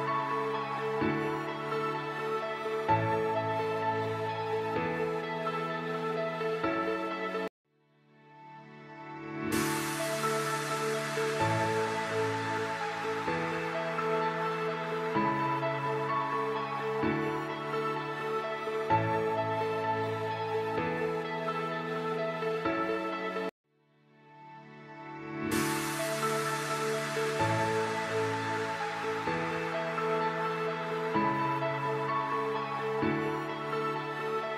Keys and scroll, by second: 4.4 F4, 6.5 shift+F2, 6.7 F3, 12.9 c, 19.1 F4, 20.2 c, 20.8 shift+F2, 21.8 Escape, 32.0 F2.